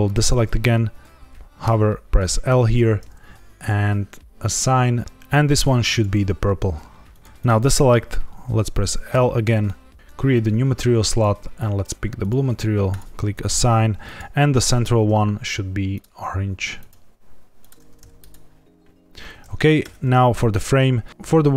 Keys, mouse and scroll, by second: 0.0 click, 1.6 l, 2.0 ctrl+z, 2.4 l, 3.5 click, 4.3 click, 5.8 click, 7.2 l, 7.3 click, 9.1 l, 10.2 click, 11.0 click, 12.8 click, 14.0 click, 14.6 l, 15.9 click, 16.7 click, 18.1 click, 19.8 Tab, 20.4 click.